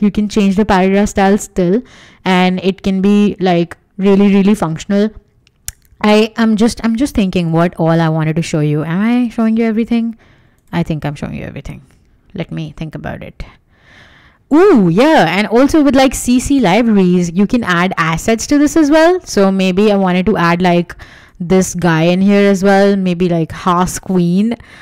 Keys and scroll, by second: 11.1 w, 14.0 w.